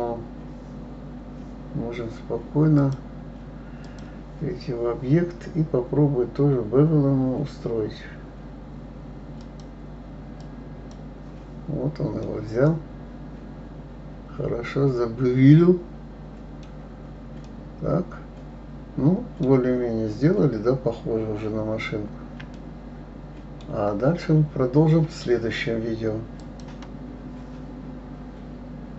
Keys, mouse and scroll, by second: 2.8-5.8 drag, 9.4-12.3 drag, 12.3-15.4 middle drag, 16.7-17.4 scroll down 4, 17.4-19.8 middle drag, 19.8-20.6 scroll up 2, 20.6 scroll up 1, 21.0 scroll down 1, 21.8 scroll up 1, 22.5-27.3 shift+middle drag.